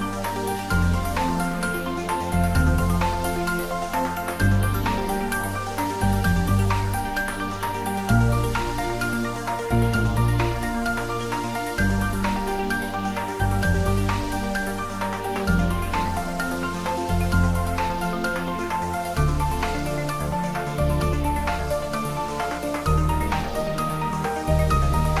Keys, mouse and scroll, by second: 0.2-1.1 typing, 1.7 Down, 3.9 click, 4.4 scroll down 1, 4.9-8.2 middle drag, 8.2 click, 9.6 scroll up 1, 10.5-14.7 middle drag, 14.7-15.7 scroll up 1, 15.7 Tab, 16.7-17.1 scroll down 1, 17.1 middle click, 17.8-18.7 scroll up 1, 19.2 click, 19.7 scroll up 1, 20.7 alt+click, 22.6-25.2 shift+middle drag.